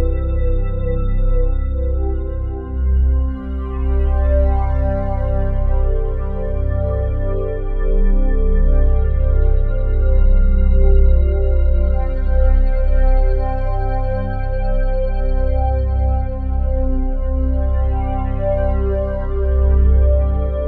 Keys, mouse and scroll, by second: 0.5-20.6 ctrl+alt+drag, 18.4 space.